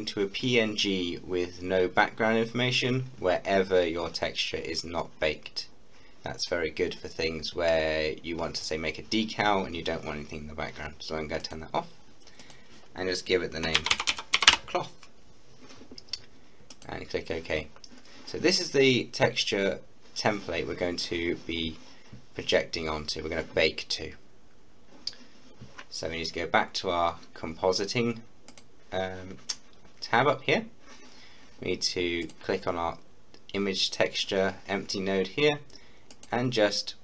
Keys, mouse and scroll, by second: 11.5 click, 13.7-14.4 typing, 16.8 click, 17.5 scroll down 1, 28.5 click, 32.3 click, 36.1-37.0 drag.